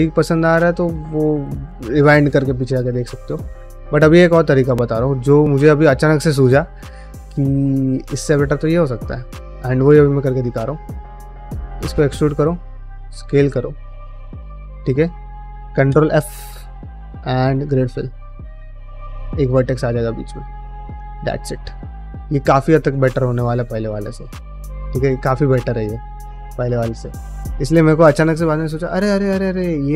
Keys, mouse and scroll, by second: 0.1 g, 0.6 middle click, 3.3 middle click, 10.7 alt+click, 11.1 middle click, 11.4 e, 12.3 s, 13.6 ctrl+middle click, 13.9 shift+middle click, 14.2 middle click, 15.8 ctrl+f, 18.1 middle click, 18.5 click, 18.7-21.9 typing, 19.5 click, 20.1 click, 20.7 click, 21.7 click, 22.3 middle click, 22.6 ctrl+middle click, 23.0 middle click, 23.7 ctrl+middle click, 23.9 middle click, 24.6 ctrl+middle click, 24.9 ctrl+middle click, 25.7 middle click, 27.4 middle click, 28.6 click, 28.8 g, 29.4 click, 29.5 g.